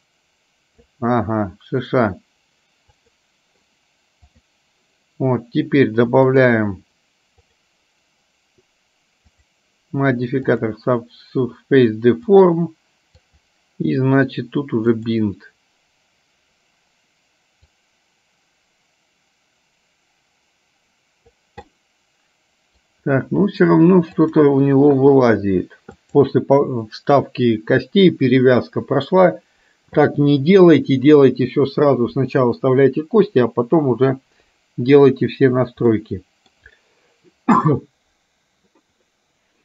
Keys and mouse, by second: 0.0 click, 3.0 click, 4.3 click, 6.5 click, 7.5 click, 9.4-10.9 drag, 12.4 click, 17.9-21.5 drag, 21.8-22.9 middle drag, 24.3 click, 26.1 click, 36.0 middle click, 39.3-39.6 middle drag.